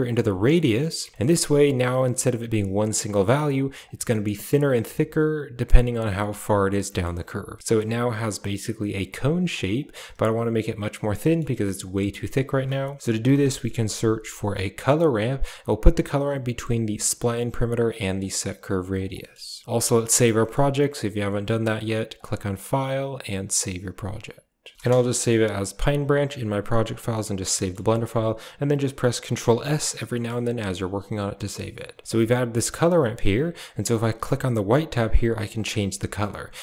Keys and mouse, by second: 1.2 shift+middle click, 1.9 drag, 2.6 click, 3.7 click, 3.7-4.5 drag, 6.8 middle drag, 8.1 middle click, 9.4 click, 10.9 middle click, 11.7 drag, 12.3 shift+a, 18.1 click, 18.6 click, 19.0 middle click, 20.3 middle drag, 22.0-24.7 drag, 26.7 click, 27.4 shift+middle click, 27.8 middle click, 29.5 ctrl+s, 30.0 middle click, 30.4 click, 32.4 middle click, 34.0 click, 35.4 click.